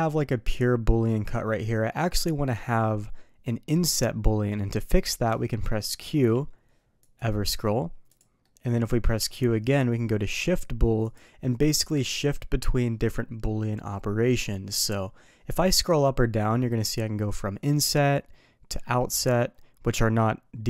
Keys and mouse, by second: 6.0 q, 8.4 middle click, 9.2 q, 18.7-20.6 middle drag.